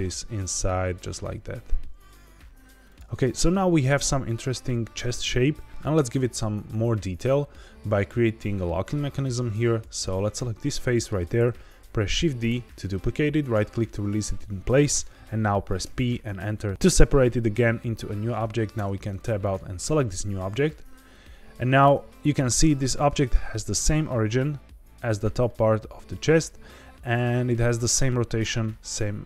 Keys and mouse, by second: 1.0 s, 2.8 click, 3.1 middle click, 10.0 click, 10.5 middle click, 12.4 shift+d, 13.4 right click, 15.8 p, 18.7 Tab, 19.4 click, 21.8 Tab, 22.8 middle click, 25.4 middle click, 28.6 middle click.